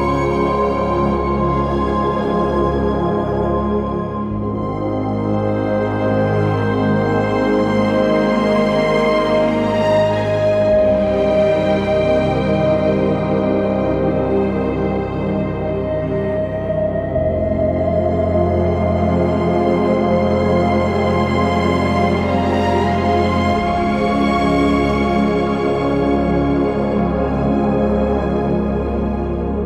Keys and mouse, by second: 5.4 alt+shift+click, 8.0 shift+click, 9.6 shift+click, 11.0 shift+click, 11.8 shift+click, 13.8 shift+click, 14.7 shift+click, 18.7 shift+click, 19.4 shift+click, 20.1 alt+shift+click, 22.8 shift+click, 25.7 shift+middle click, 28.0 ctrl+middle click.